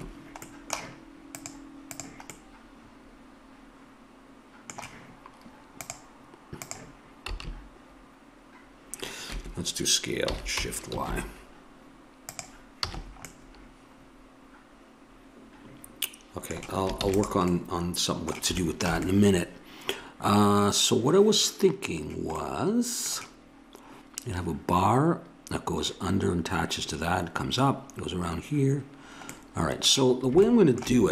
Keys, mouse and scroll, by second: 0.5 middle click, 1.3-3.2 drag, 3.2-5.1 middle drag, 5.8-7.7 drag, 7.3 s, 10.3 s, 12.9 a, 17.0 ctrl+s, 21.0-22.4 middle drag, 24.9-29.3 middle drag.